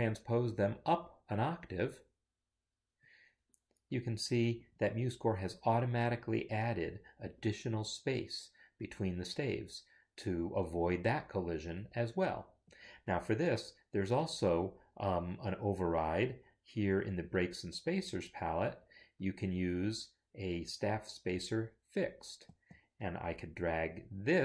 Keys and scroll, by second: 1.8 ctrl+Up.